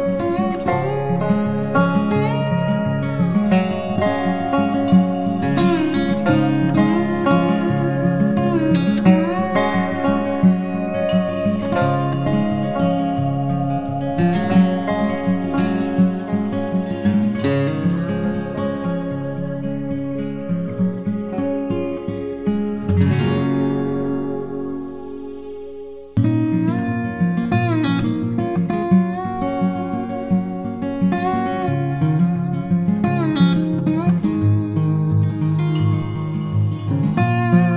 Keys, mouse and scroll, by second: 4.0-4.7 typing, 12.8 double click, 20.9-23.3 typing, 23.7 double click, 27.5-29.8 typing, 30.2 double click, 32.2-33.1 typing, 33.7 double click.